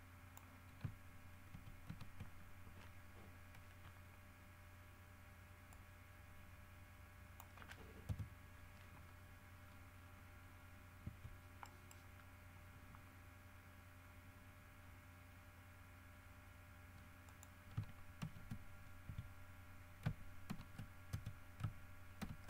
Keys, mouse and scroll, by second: 1.7 ctrl+c, 5.9-7.7 drag, 8.3 KP_7, 9.8-10.5 scroll down 2, 10.7 scroll up 2, 11.2 Tab, 11.8 right click, 13.7-15.3 scroll up 8, 17.5 click, 18.4 ctrl+v, 19.3 Tab, 20.7 ctrl+v, 21.5 ctrl+Tab, 22.3 ctrl+v.